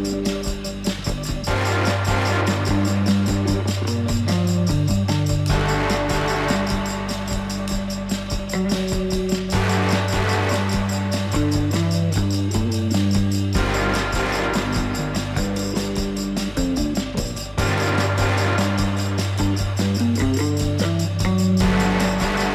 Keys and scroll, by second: 7.4 alt+w, 10.4 F4.